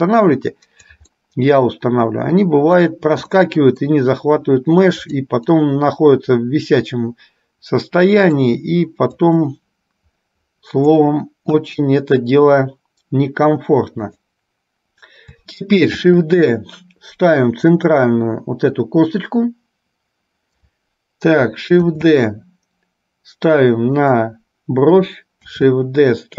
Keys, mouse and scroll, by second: 1.3-3.0 middle drag, 3.6 middle click, 5.2 click, 5.7-8.6 middle drag, 9.5-11.0 drag, 11.6 KP_1, 14.2 click, 16.2 shift+d, 22.0 shift+d, 25.7 shift+d.